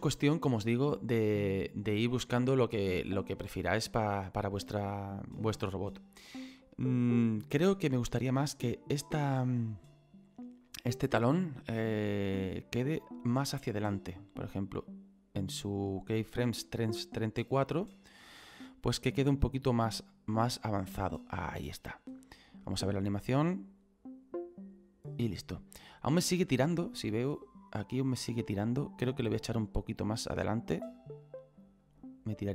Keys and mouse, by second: 6.3 middle click, 8.6 right click, 11.6 click, 16.7 middle click, 18.7 middle click, 19.8 click, 22.3 click, 29.4 right click, 31.2 click.